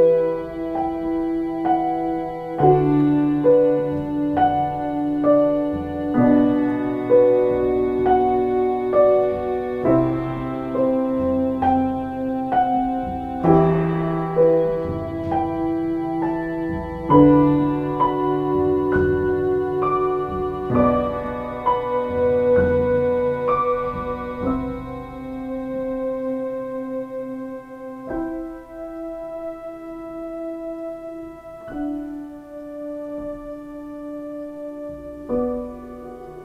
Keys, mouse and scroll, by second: 1.4 ctrl+z, 6.7 ctrl+space, 9.7 ctrl+space, 19.0 ctrl+space, 19.9 space, 20.9 x.